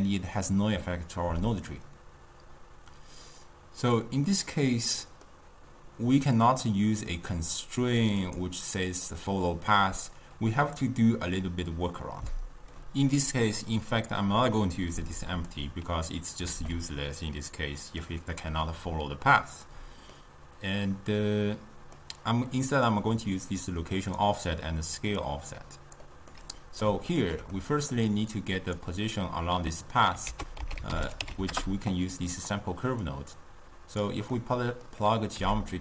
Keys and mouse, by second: 4.4-6.6 middle drag, 6.6 click, 8.3 click, 9.1-12.1 drag, 15.5 click, 16.6 alt+g, 17.7-22.9 middle drag, 22.9-25.3 drag, 26.4-28.4 middle drag, 28.4 click, 30.3 ctrl+a, 33.1 drag, 34.4-35.4 middle drag, 35.4 g.